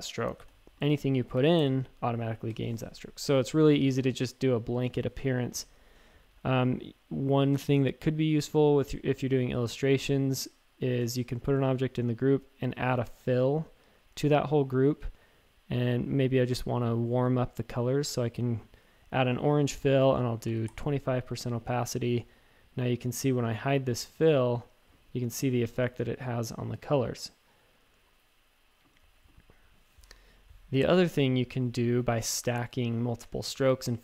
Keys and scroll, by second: 0.3 super+x, 0.4 a, 1.3 super+f, 1.6 shift+super+a, 5.4 v, 20.1-21.0 typing.